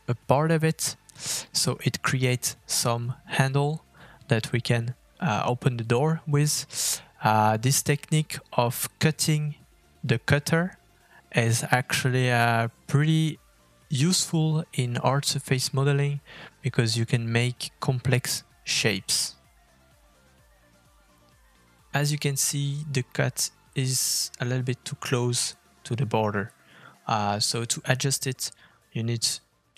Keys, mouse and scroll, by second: 1.1 middle click, 3.3 shift+middle click, 4.9 g, 16.6 KP_Divide, 17.9 middle click, 18.6-20.7 scroll up 2, 20.7-21.0 scroll up 1, 21.2 click, 24.3 g.